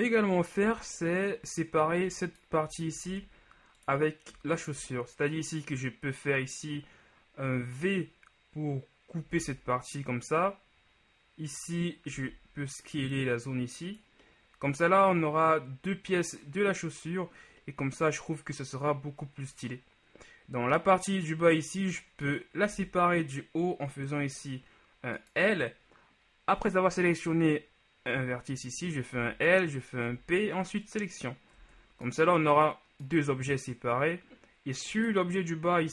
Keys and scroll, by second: 0.8 Tab, 3.2 ctrl+alt+Tab, 9.7 v, 12.3 s, 23.1 l, 29.6 l, 30.2 p, 31.7 Tab.